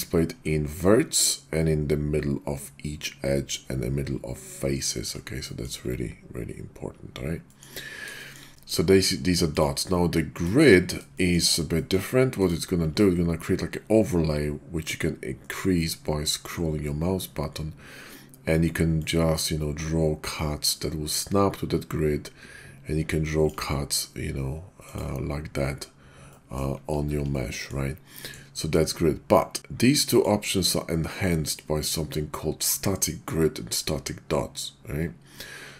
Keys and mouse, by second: 5.4 middle click, 7.4 middle drag, 8.1 shift+middle click, 8.5 middle drag, 9.4 click, 10.3 click, 11.1 shift+middle drag, 11.8 middle click, 19.0-23.5 ctrl+drag, 24.9 click, 26.3 middle drag, 27.0 ctrl+z, 27.3-27.7 drag, 28.1 click, 29.9-35.5 drag.